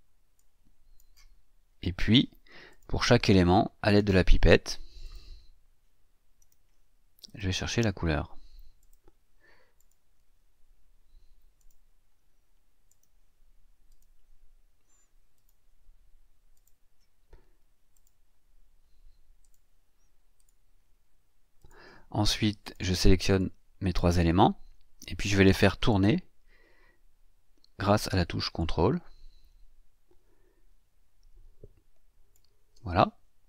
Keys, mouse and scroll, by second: 0.4-1.2 drag, 1.7-2.3 ctrl+scroll up 3, 2.7 click, 5.0 click, 6.4 click, 7.3 click, 8.8 click, 9.8 click, 11.6 click, 12.9 click, 13.9 click, 15.3 click, 16.5 click, 17.9 click, 19.4 click, 20.3 click, 21.6 click, 22.6 click, 23.4-24.4 drag, 25.9 click, 28.6-32.5 ctrl+drag.